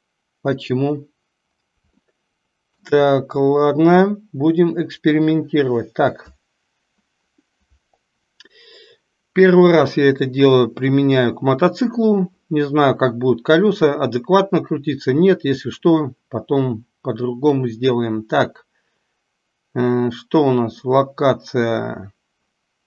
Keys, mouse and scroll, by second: 2.1-2.7 shift+middle drag.